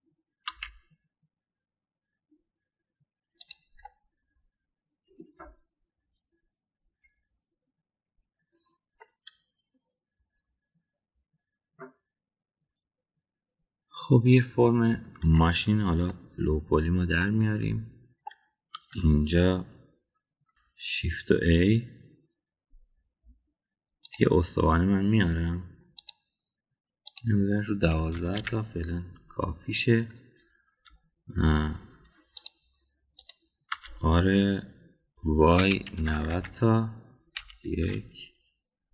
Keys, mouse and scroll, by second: 4.7-9.5 middle drag, 10.0-16.2 middle drag, 17.1-18.1 middle drag, 18.3 Tab, 19.2 middle click, 20.5 shift+s, 21.1 shift+a, 27.0 click, 28.0-30.6 drag, 33.4 click, 34.1 click, 34.6 r, 38.3 KP_1, 38.8 KP_3.